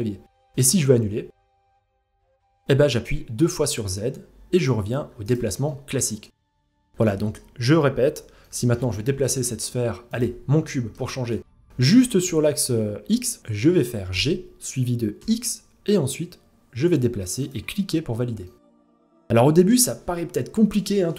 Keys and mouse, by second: 5.3 middle drag, 5.8 g, 6.6 middle drag, 8.0 middle drag, 8.8 shift+middle click, 9.7-10.2 drag, 10.2 shift+middle drag, 10.9 middle click, 13.7 g, 18.0-19.3 middle drag.